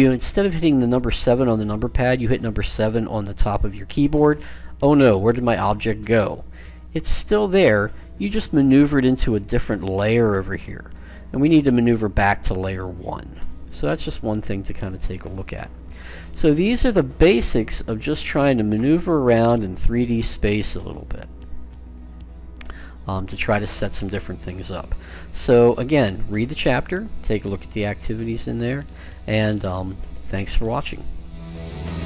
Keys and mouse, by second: 3.8 7, 11.7-13.3 drag, 25.5-28.2 middle drag.